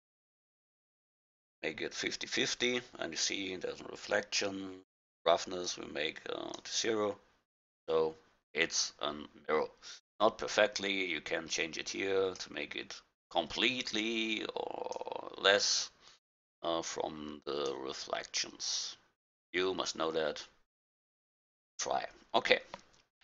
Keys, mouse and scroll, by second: 5.9-7.6 drag, 11.6 click, 14.0-15.7 drag, 16.4-18.2 drag, 21.8-23.2 middle drag.